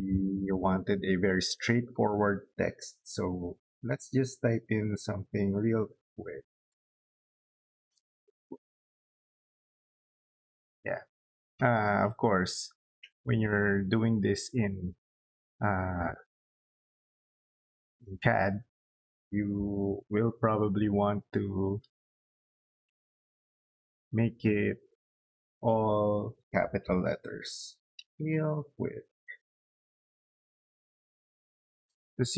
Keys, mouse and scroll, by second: 7.4-9.2 typing, 14.1 click, 17.5 click, 17.8 click, 18.4 middle click, 18.8 middle click, 19.8 o, 20.0 space, 20.5 click, 22.8 click, 23.7 click, 23.9 click, 26.1 Caps_Lock, 27.3-29.2 typing, 30.3 click, 31.1 middle click.